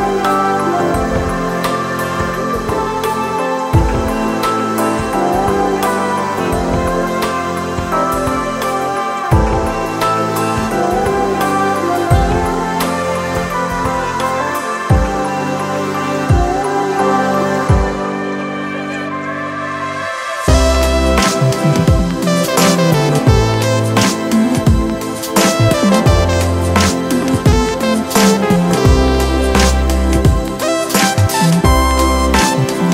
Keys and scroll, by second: 14.3 super+s, 14.8-18.2 typing, 18.5 Return.